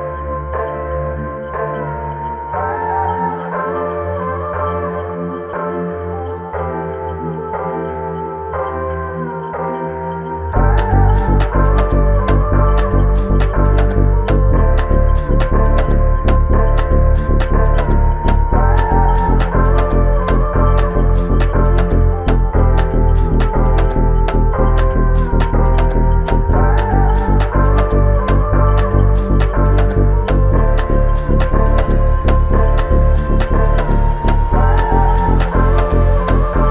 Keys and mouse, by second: 0.8 typing, 3.6 double click, 5.8 double click, 23.0 double click.